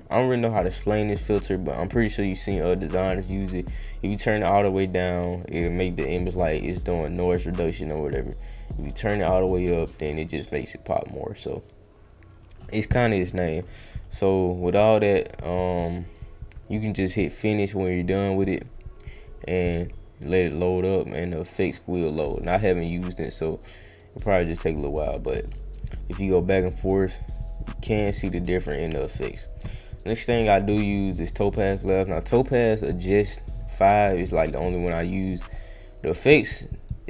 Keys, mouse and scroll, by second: 8.5-10.8 drag, 11.3 click, 14.2 click, 15.0 click, 15.4 click, 15.7 click, 16.0 click, 17.1 click, 25.0 click, 26.5 click, 27.4 click, 27.8 click, 28.9 click, 30.3 click, 31.8 click, 34.5 click, 36.8 click.